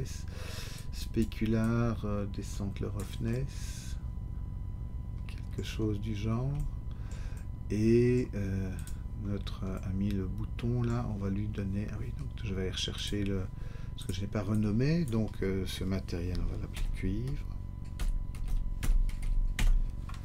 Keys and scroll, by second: 17.3-19.2 typing, 19.5 Return.